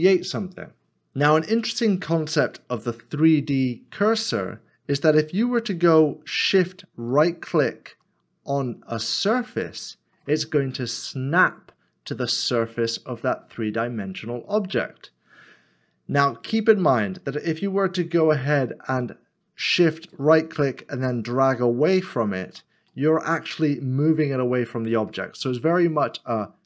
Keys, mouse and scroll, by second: 6.3 middle click, 7.1 shift+right click, 9.5 middle click, 10.5-11.2 scroll up 1, 11.4 middle click, 14.8 middle click, 20.1 shift+right click, 22.9 middle click.